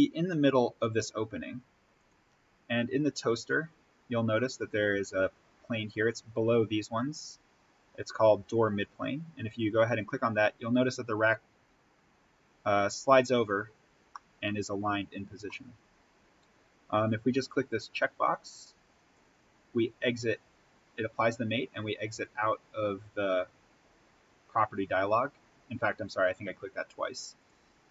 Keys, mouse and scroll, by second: 1.9 click, 9.8 click, 11.7-12.9 scroll down 1, 14.0-17.2 middle drag, 17.2 click, 21.2-21.8 scroll up 1, 22.0 click, 27.3-27.9 drag.